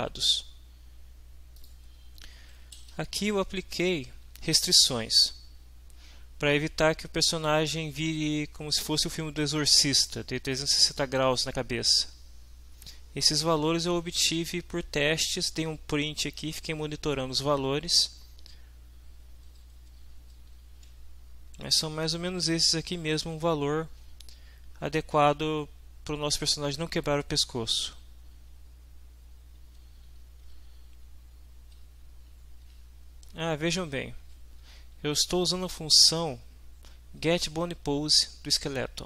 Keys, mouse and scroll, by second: 1.5 click, 2.6 Up, 2.9 Home, 3.5 shift+Down, 3.8 shift+End, 4.1 shift+Down, 13.3 Up, 14.2 Down, 19.5 Down, 20.6 Home, 21.3 shift+Down, 21.9 shift+End, 28.3 Down, 29.4 Up, 30.0 Home, 31.0 Up, 33.8 Right, 36.5 shift+Right, 38.9 shift+Right.